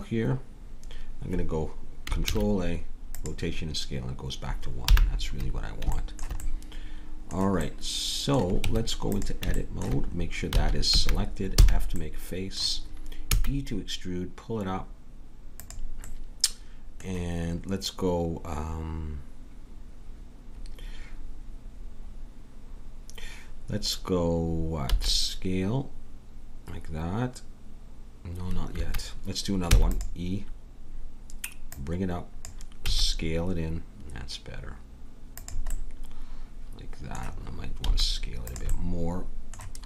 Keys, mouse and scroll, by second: 2.2 ctrl+a, 4.8 n, 8.6 Tab, 10.6 a, 10.9 a, 11.6 f, 12.1-14.2 drag, 13.3 e, 16.1-19.5 middle drag, 24.9 s, 29.7 e, 31.7-33.6 drag, 32.9 s, 35.7-36.7 middle drag, 37.9 s, 38.7 click.